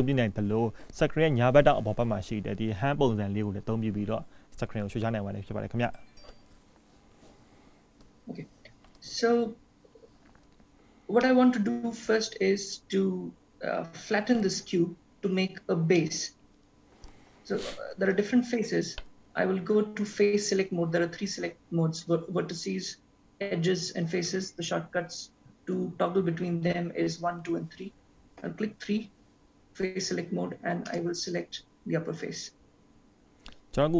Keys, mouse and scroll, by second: 11.3 middle click, 16.0 middle click, 26.5 1, 26.5 2, 26.5 3, 28.4 3, 30.9 click.